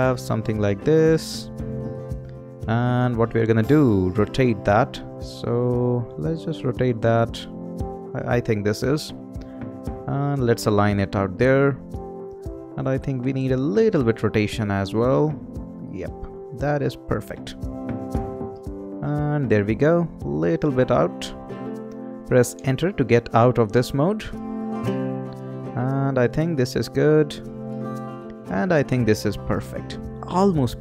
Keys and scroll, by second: 22.5 Return.